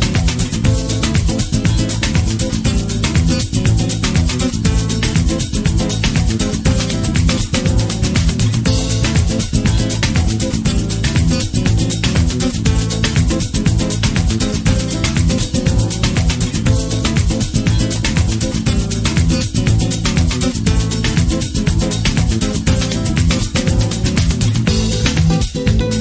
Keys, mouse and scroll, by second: 1.5-3.6 drag, 3.2-3.6 scroll down 2, 3.6-6.0 middle drag, 6.0-10.4 drag, 10.4-13.6 middle drag, 13.6-20.2 drag, 18.4 KP_6, 20.2-22.2 middle drag, 21.7-22.2 scroll up 2, 22.2-25.6 middle drag, 25.6-26.0 drag.